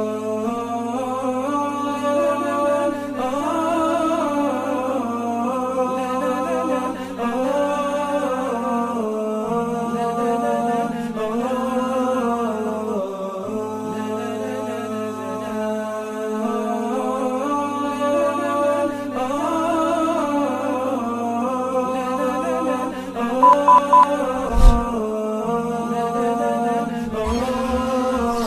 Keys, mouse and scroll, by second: 5.7 ctrl+shift+], 7.3 alt+scroll up 1, 8.3 alt+scroll up 1, 9.1 ctrl+shift+], 9.6 alt+scroll down 1, 10.4 space, 15.1 Delete, 16.8 double click, 18.4-18.7 scroll up 1, 18.9 alt+scroll up 1, 19.3 alt+scroll down 1.